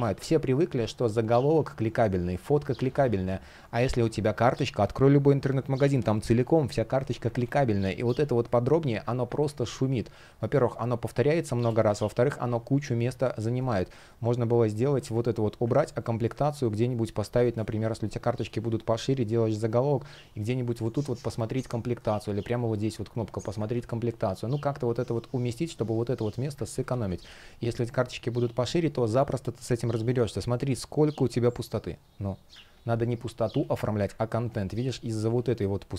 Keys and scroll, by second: 0.0 space, 2.6 super+z, 7.1 super+z, 9.0 super+z, 9.4 space, 17.1 shift+Return, 17.8 shift+p, 21.2 super+z, 23.4 super+z, 26.4 super+z, 27.4 space, 29.7 shift+p, 32.4 super+z, 34.0 super+z.